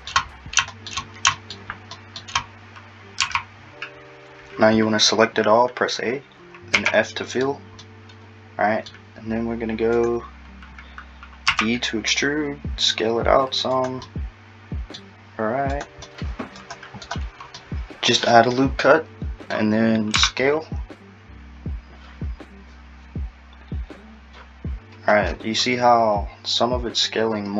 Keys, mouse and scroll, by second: 0.3-0.7 scroll down 5, 0.7 shift+middle click, 1.3 shift+middle click, 2.0 shift+middle click, 2.5-3.2 scroll down 2, 3.2 scroll down 1, 3.3 a, 6.8 f, 7.2 scroll down 2, 7.9 middle click, 10.0 click, 11.5 e, 14.1 middle click, 15.2-15.8 scroll, 15.8 click, 16.0 scroll down 1, 16.1 middle click, 17.6 middle click, 20.2 s.